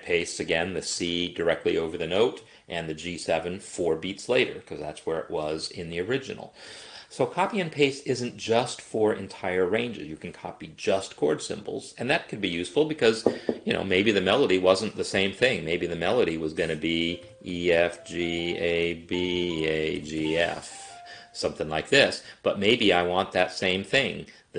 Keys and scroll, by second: 17.0-20.6 typing, 20.8 Escape.